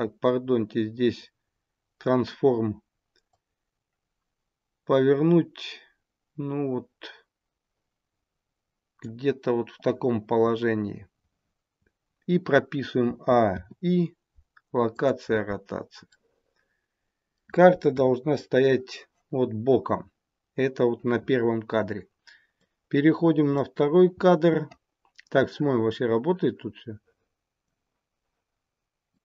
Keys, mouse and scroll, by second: 3.2 click, 13.0 a, 13.4 i, 16.1 middle click, 17.9 KP_1, 22.5 click, 25.3 click, 29.1 click.